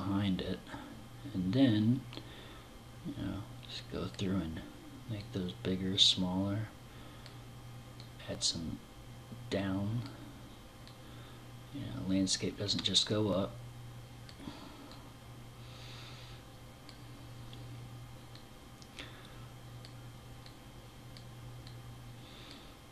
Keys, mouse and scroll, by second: 1.5 click, 4.6 click, 7.4 click, 10.3 click, 14.3 click, 17.7 click, 19.9 click, 21.0 click.